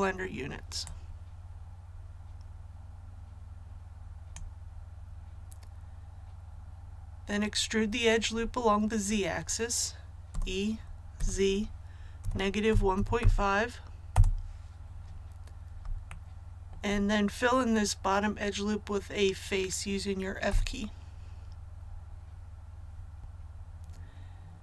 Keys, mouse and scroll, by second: 0.8-5.1 drag, 10.2 e, 11.1 z, 12.6 KP_1, 12.9 KP_Decimal, 13.1 KP_5, 14.0 Return, 16.0 shift+middle click, 16.5 shift+scroll up 1, 20.4 f, 23.2 KP_1.